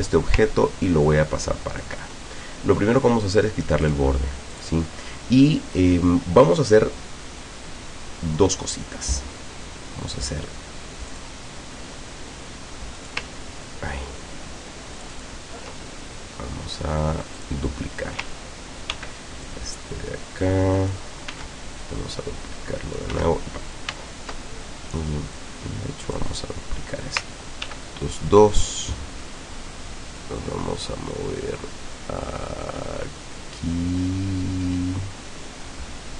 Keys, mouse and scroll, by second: 0.5-2.1 ctrl+drag, 2.2 ctrl+click, 3.9 click, 4.6 click, 7.3-8.5 drag, 11.1 click, 13.0 ctrl+click, 15.0 ctrl+click, 17.4 click, 18.9 ctrl+d, 19.5-21.1 ctrl+drag, 21.3 ctrl+s, 21.9-23.2 ctrl+drag, 23.1 ctrl+s, 23.9 ctrl+z, 25.4-26.3 drag, 27.7 ctrl+d, 28.5-36.1 ctrl+drag.